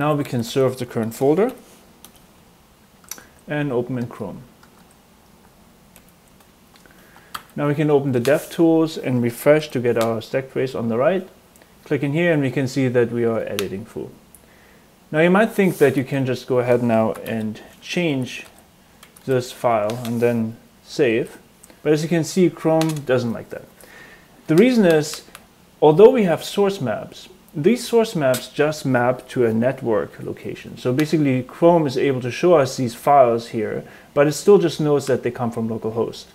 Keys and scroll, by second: 0.0-1.9 typing, 2.1 Return, 3.0 super+Tab, 3.9 super+Tab, 4.8 super+Tab, 5.9 super+r, 7.3 alt+super+j, 9.5 super+r, 15.9 typing, 17.0-19.7 typing, 21.1 super+s.